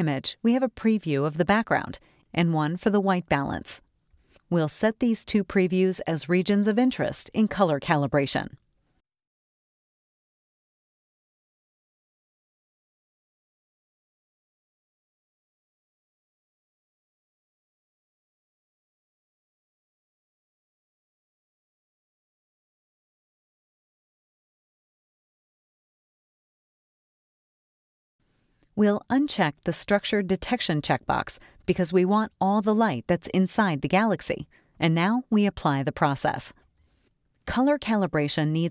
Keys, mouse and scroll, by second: 1.4 scroll down 1, 2.7 click, 3.4-3.8 scroll down 2, 3.9 scroll up 2, 5.4 click, 5.9 click, 10.1 middle click, 10.1 click, 10.7 scroll up 2, 10.8 scroll down 2, 12.2 click, 13.8 click, 15.4 click, 16.2-18.6 drag, 21.1-24.6 ctrl+drag, 27.1-28.2 drag, 30.1 click, 32.5-35.8 middle drag.